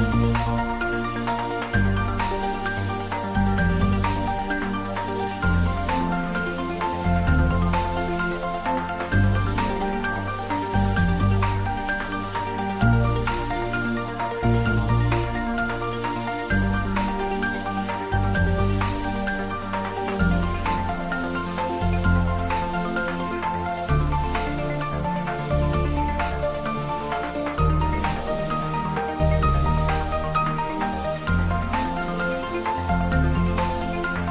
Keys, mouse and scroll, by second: 0.0-10.1 ctrl+middle drag, 10.1 middle click, 11.2 shift+middle click, 12.2 ctrl+middle click, 12.8 shift+middle click, 13.4 click, 13.9 Tab, 15.2 click, 16.4 4, 16.5 click, 16.9 3, 17.0 click, 17.9 g, 19.1 click, 19.2 Tab, 19.9-22.7 middle drag, 22.7 d, 23.2 click, 23.4 s, 24.8 z, 24.9 click, 25.7 ctrl+s, 26.0-29.0 middle drag, 28.8 s, 29.1 shift+middle click, 30.0 ctrl+s, 32.4 middle click, 33.4 ctrl+middle click, 33.9 shift+middle click.